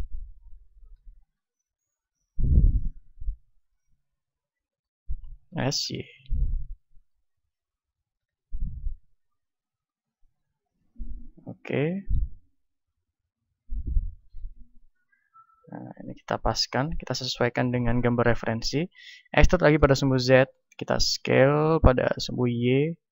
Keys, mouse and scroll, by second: 0.6-1.7 middle drag, 0.9 s, 2.1-5.4 drag, 5.4-6.4 right drag, 5.4 s, 7.0-9.4 drag, 8.0 r, 9.9-19.3 drag, 19.3 middle click, 19.3 e, 20.6-23.1 drag, 22.2 s.